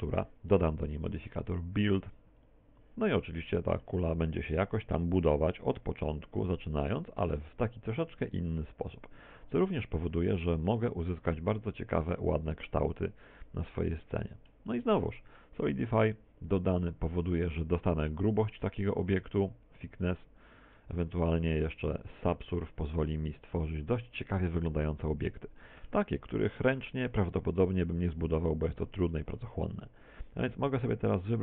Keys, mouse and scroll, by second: 0.3 t, 0.8 scroll down 4, 3.4 click, 4.3 middle click, 5.7 click, 8.3 middle click, 8.8 middle click, 18.3 click, 20.0 click, 22.2 ctrl+1, 22.7 ctrl+2, 23.4 middle click, 24.1 middle click, 25.1 middle click, 25.8 middle click, 27.4 middle click, 30.1 middle click.